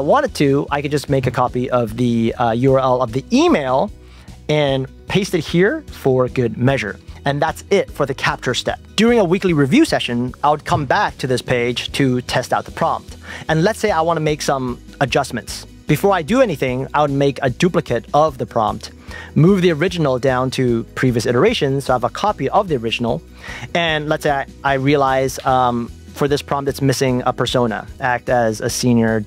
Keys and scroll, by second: 3.2 super+c, 3.5 super+Tab, 17.8 super+d, 24.1 shift+super+Left.